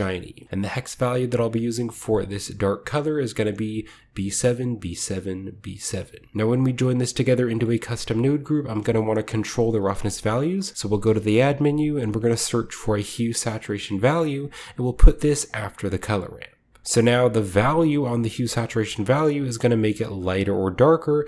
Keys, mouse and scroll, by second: 0.4-1.7 scroll up 2, 0.7 click, 7.3 scroll down 2, 7.4-8.5 middle drag, 8.1-11.2 drag, 8.5-9.5 scroll down 1, 9.8-11.3 typing, 13.2 click, 15.4 click, 15.8 drag, 16.8-21.2 drag.